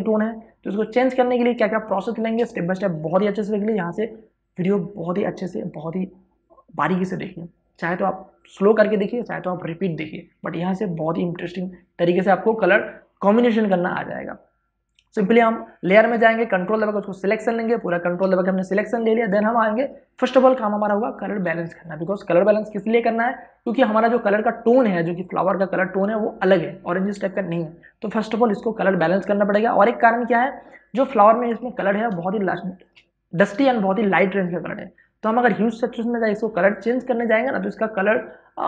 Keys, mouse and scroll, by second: 14.8 click, 29.9 space, 30.4 ctrl+click, 32.8 space, 33.0 ctrl+click.